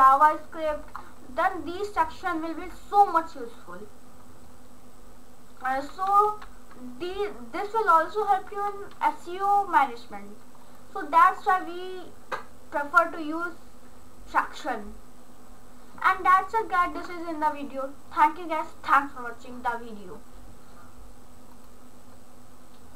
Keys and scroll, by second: 6.2 ctrl+s.